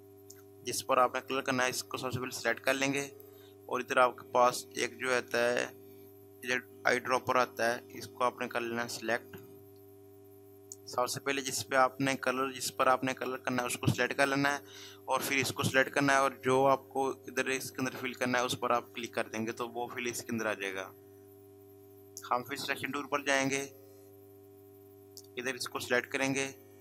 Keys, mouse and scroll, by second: 1.2 click, 9.2 click, 18.9 click, 19.0 click, 23.5 click, 25.7 click.